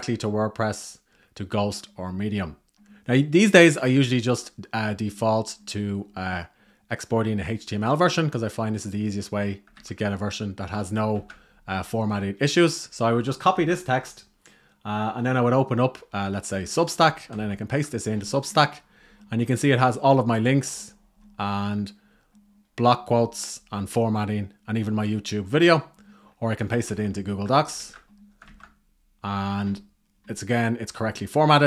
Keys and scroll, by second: 9.4 super+a, 10.8 super+c, 13.4 super+c, 16.9 super+v, 26.7 super+v, 27.4 super+z, 28.1 super+v.